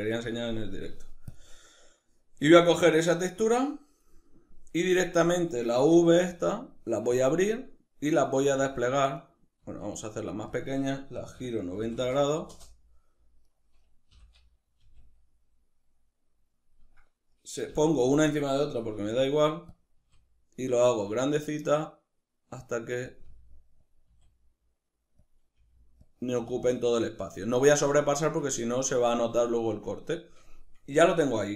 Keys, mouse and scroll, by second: 3.9-6.9 middle drag, 5.8 s, 6.9 click, 8.2 g, 9.0 right click, 9.4 s, 10.4 click, 11.0 r, 13.1 right click, 13.8 l, 16.3 click, 17.3 l, 19.5 click, 19.7 s, 22.8 click, 23.0 g, 23.7 click, 23.8 s, 25.0 click, 25.2 g, 25.8 click, 26.0 s, 26.7 click, 29.4-31.5 shift+middle drag, 31.3 Tab.